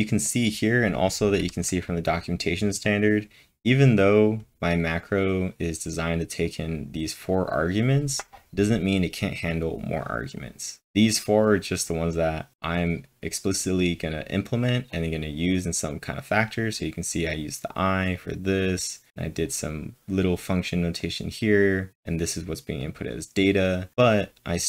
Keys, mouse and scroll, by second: 2.8 click, 3.6-6.3 scroll up 11, 6.3 scroll up 1, 6.4 click, 7.6 click, 8.4-10.5 drag, 10.5-10.8 scroll down 1, 11.4-14.6 drag, 14.9 click, 14.9 scroll down 1, 15.8 click, 16.4-18.1 drag, 18.1-22.8 drag, 22.8 click, 23.9-24.5 scroll down 9, 24.5-24.6 scroll up 2.